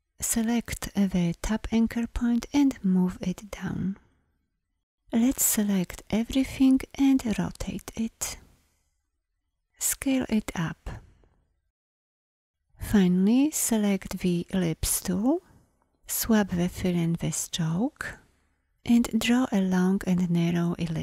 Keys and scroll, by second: 2.7 Down, 14.6 l.